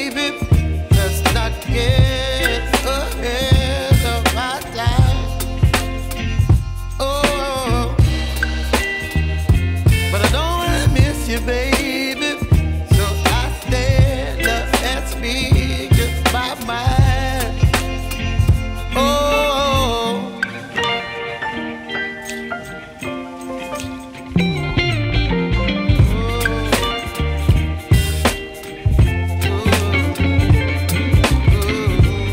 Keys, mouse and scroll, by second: 1.2 Tab, 1.2 KP_0, 1.3 right click, 27.8 m.